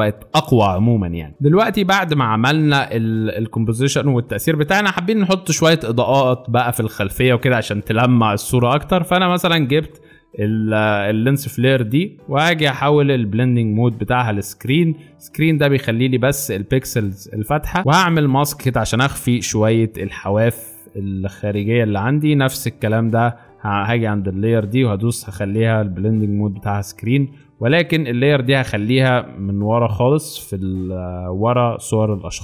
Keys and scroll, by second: 22.5 space.